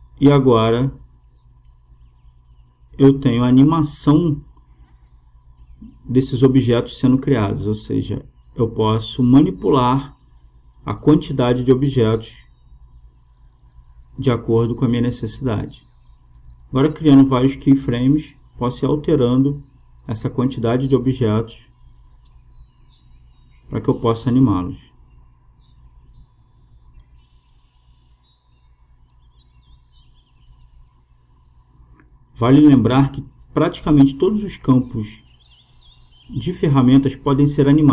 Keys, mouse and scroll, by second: 3.1-7.9 drag, 15.6-19.7 drag, 22.7-25.1 drag, 25.4-26.4 drag, 26.4 right click, 27.1 click, 28.2-30.0 drag, 30.7-33.9 drag.